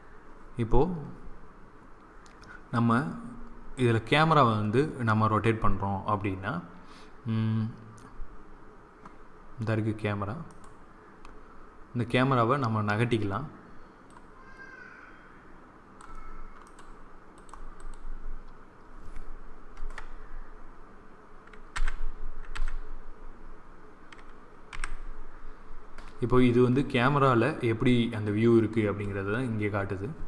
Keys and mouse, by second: 14.8-15.9 drag, 18.0-19.0 drag, 19.7 KP_0, 21.6 n, 22.4 n.